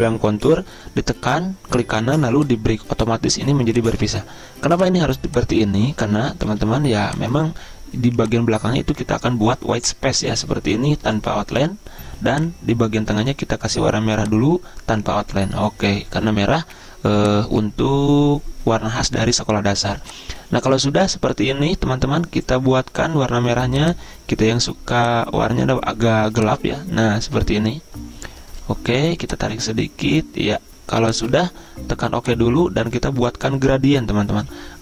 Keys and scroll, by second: 6.5 ctrl+z.